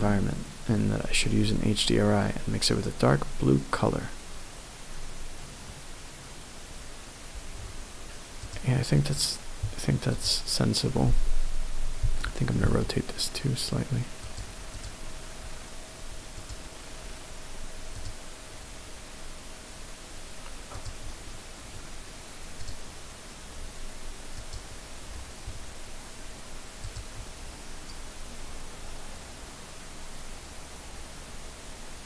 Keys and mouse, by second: 8.4 click, 10.1 click, 12.0 r, 12.7 z, 14.3 click, 14.7 click, 16.4 click.